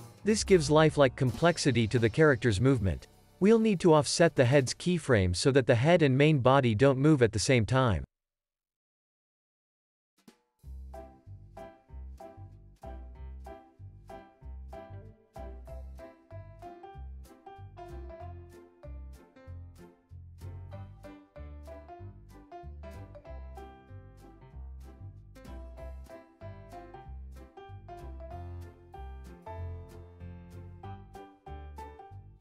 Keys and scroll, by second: 2.0 alt+w, 3.1 super+s, 3.4 q, 7.6 alt+w, 8.1 super+s, 8.7 space, 14.3 space, 14.7 super+s, 17.9 alt+q, 18.4 super+s, 19.4 space, 25.4 alt+w, 25.6 space.